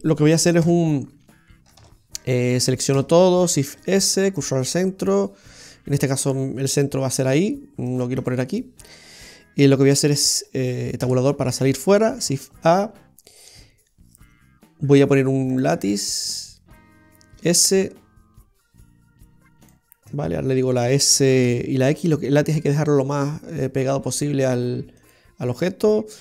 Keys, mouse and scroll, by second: 0.7 KP_7, 1.8 shift+a, 3.0 a, 3.7 shift+s, 7.9 click, 8.2 click, 11.1 Tab, 12.3 shift+a, 17.5 s, 21.2 s.